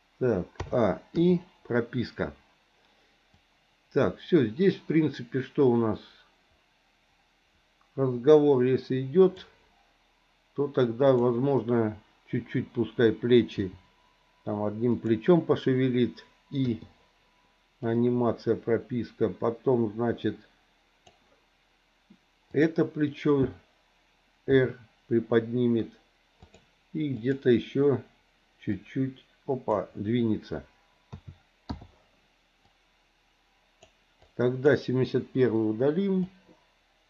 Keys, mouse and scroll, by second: 0.6 a, 1.2 i, 3.4-9.4 drag, 13.6 r, 16.7 i, 17.9-21.2 drag, 24.4 r, 27.1 click, 28.9 click, 31.1 a, 31.7 i, 32.7-33.9 drag, 34.2 click, 35.4 Delete, 36.3-37.0 drag.